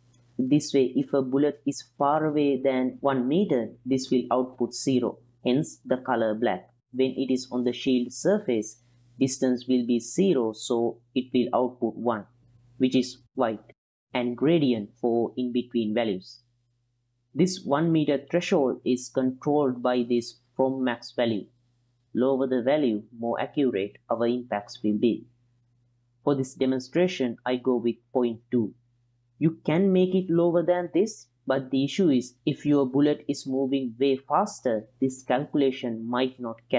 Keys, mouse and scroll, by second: 1.9-3.8 middle drag, 9.0-12.9 drag, 27.3-29.0 drag, 30.3-35.4 drag, 36.1-36.7 middle drag.